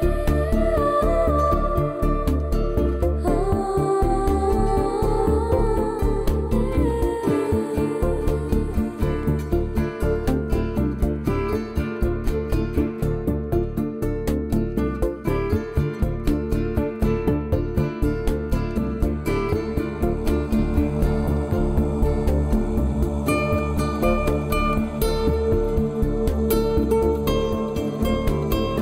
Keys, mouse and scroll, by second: 0.2 click, 0.5 middle click, 1.0 shift+middle click, 1.7 click, 3.0 middle click, 4.3 click, 4.5 click, 4.8 click, 5.0 click, 5.5 click, 6.3 click, 6.5 middle click, 8.8 Delete, 10.8 scroll down 3, 12.3 shift+middle click, 12.7 shift+middle click, 13.5 click, 14.7 click, 15.3 click, 15.7 click, 15.9 click, 16.2 click, 16.4 click, 16.8 click, 17.0 click, 17.5 click, 18.7 Delete, 19.7 middle click, 22.0 middle click, 22.4 middle click, 22.8-23.6 scroll down 6, 23.8 middle click, 24.0 scroll up 4, 24.2 shift+middle click, 24.3 shift+middle click, 26.4 Tab, 27.5 click, 28.4 scroll down 2, 28.6 middle click.